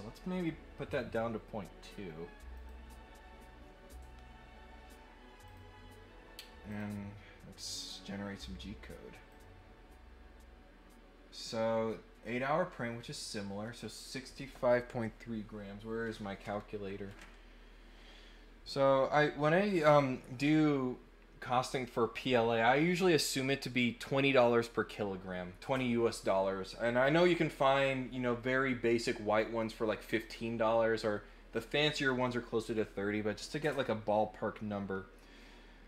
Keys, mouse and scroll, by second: 2.5 click, 5.4 click, 6.7 click, 9.3 click.